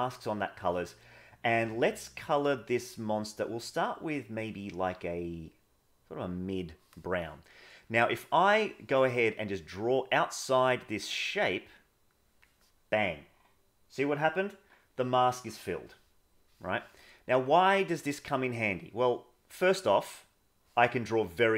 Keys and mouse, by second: 8.1 middle click, 9.6-12.4 drag, 16.4 middle click, 17.5-19.5 drag, 20.7 middle click.